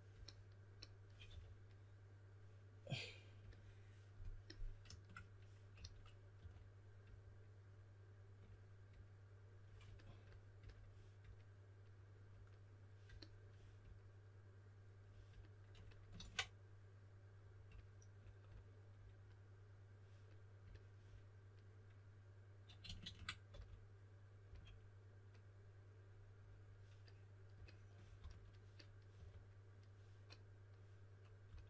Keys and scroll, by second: 1.2 4, 5.7-6.8 typing, 16.1 super+z, 23.4-24.4 typing, 28.1-29.6 typing, 31.4-31.6 typing.